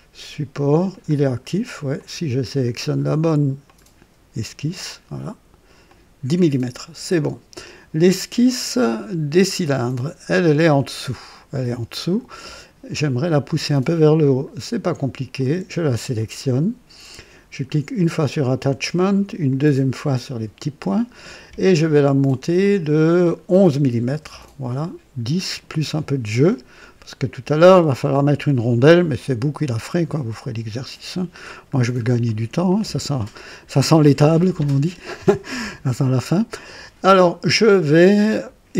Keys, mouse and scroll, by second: 0.8 click, 1.9 click, 3.5 click, 5.8 click, 6.7 scroll down 2, 10.3-12.5 drag, 15.3 click, 18.5 click, 19.4 click, 22.5 click, 24.0 KP_1, 24.2 KP_1, 27.1 click, 27.9-31.5 drag, 31.7 scroll down 2, 32.2-32.8 right drag.